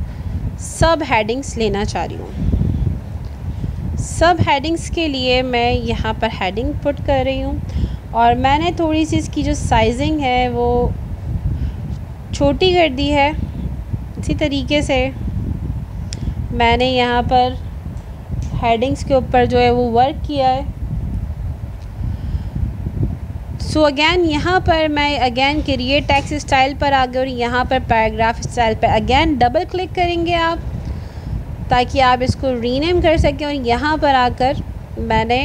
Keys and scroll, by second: 5.9 ctrl+a.